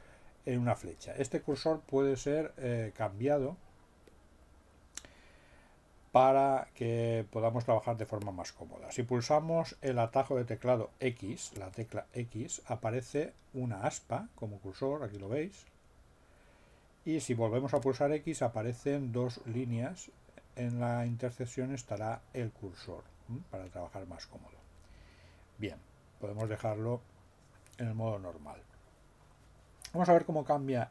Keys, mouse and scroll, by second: 11.6 x, 17.8 x, 26.4 x.